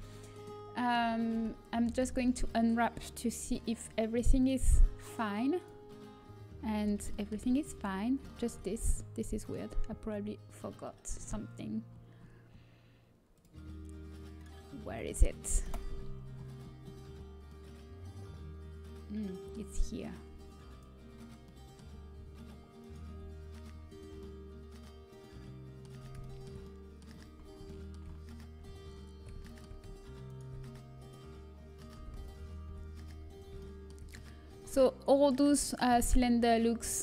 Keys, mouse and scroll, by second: 4.8-6.7 drag, 4.8 a, 6.7-11.2 middle drag, 13.0-14.3 middle drag, 14.3-15.6 drag, 15.6 KP_Decimal, 18.2-19.4 middle drag, 20.6-22.5 drag, 21.1 middle click, 22.5 middle click, 22.8-25.1 right drag, 26.3-29.5 middle drag, 30.2-31.4 middle drag, 31.4 click, 31.4 right click, 31.5-32.6 middle drag, 31.7 click, 31.7 right click, 32.6 a, 32.6 e.